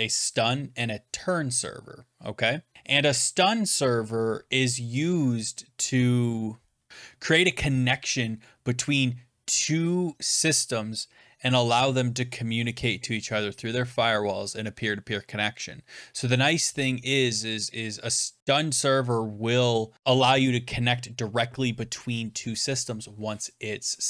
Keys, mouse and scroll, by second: 5.2 scroll, 5.3 scroll down 1, 5.3-5.8 scroll down 1, 5.8 scroll down 1, 5.9 scroll down 1, 5.9 scroll down 1, 5.9-6.5 scroll down 1, 6.5 scroll down 1, 6.6 scroll, 6.7 scroll down 1, 6.7 scroll down 1, 6.7 scroll down 1, 6.8 scroll down 1.